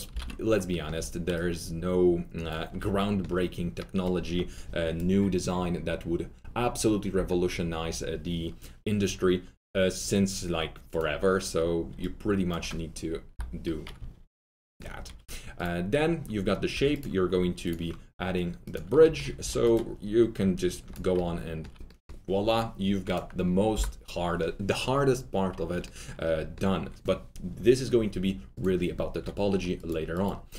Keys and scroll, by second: 0.0 alt+t, 0.1 alt+z, 7.1 Delete, 13.3 alt+Delete, 15.0 alt+super+3, 16.7 2, 19.3 alt+3, 23.7 Delete.